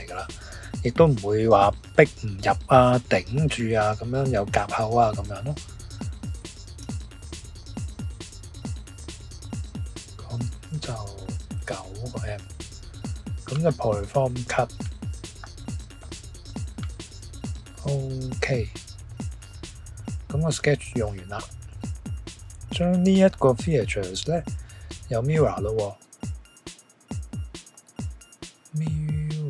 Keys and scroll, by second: 6.8 e, 11.6 9, 29.2-29.4 typing.